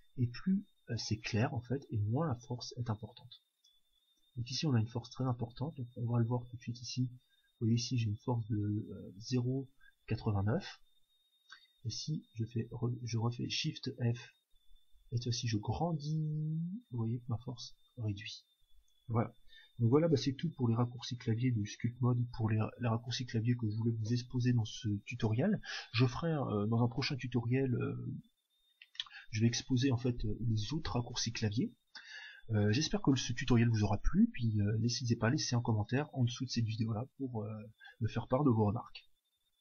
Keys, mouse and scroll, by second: 5.4-8.3 drag, 13.8 shift+f, 17.9-19.5 drag, 19.6 click.